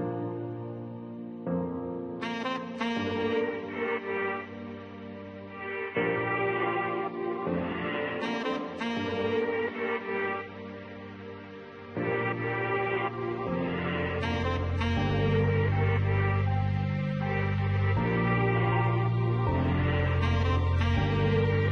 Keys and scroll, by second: 9.3 4.